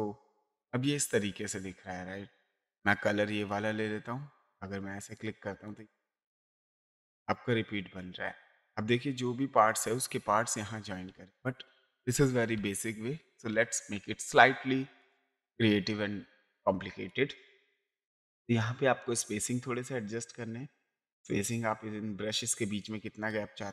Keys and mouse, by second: 3.4 click, 4.4 click, 11.1 ctrl+z, 15.0 click, 17.1 click, 19.0 click, 22.8 click.